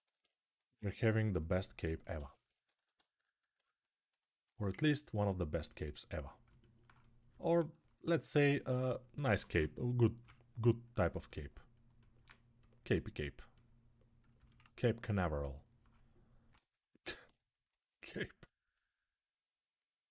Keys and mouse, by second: 9.8 [, 12.0-14.4 drag, 14.4 alt+right click, 14.7-20.1 alt+drag.